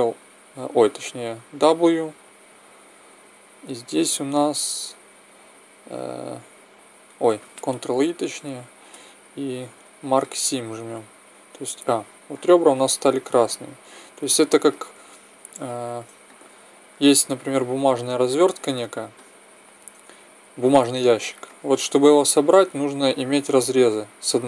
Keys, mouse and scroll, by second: 1.3 w, 7.8 ctrl+e, 11.7 a, 14.3 middle click, 15.4-22.3 middle drag.